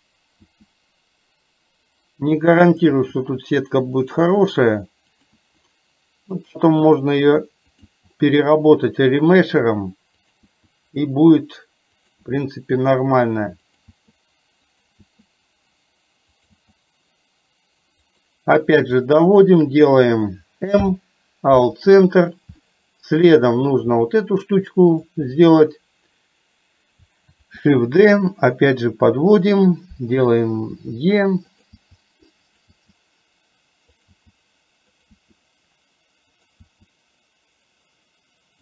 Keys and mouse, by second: 3.1-10.5 e, 15.1 e, 19.6 shift+click, 20.9 m, 22.7 shift+middle click, 25.1 click, 27.7 shift+d, 31.9 e.